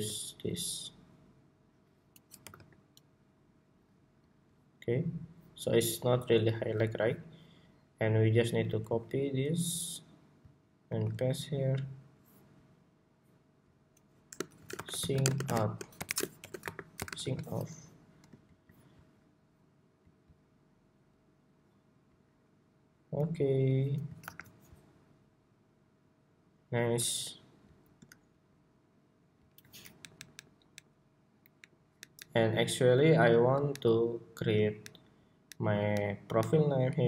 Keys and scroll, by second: 8.6 super+c, 10.6 super+v, 17.3 Escape, 18.5 Escape, 24.3 super+-.